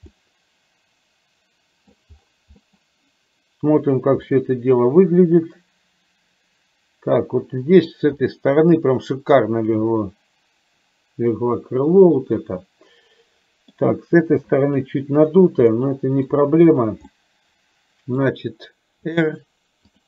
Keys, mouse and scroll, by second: 0.2-2.0 middle drag, 2.7 middle click, 4.4-7.9 middle drag, 8.4-10.9 middle drag, 11.0-13.7 middle drag, 15.4 click, 15.9 middle click, 16.9 click, 17.1-18.2 middle drag, 19.1 r.